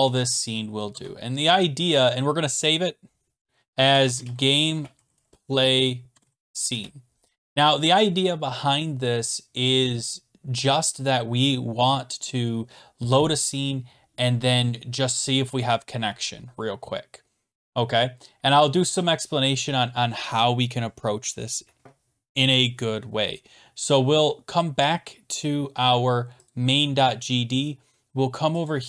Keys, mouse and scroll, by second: 0.9 ctrl+s, 3.6-6.9 typing, 11.7 typing, 26.5 click, 28.7 click.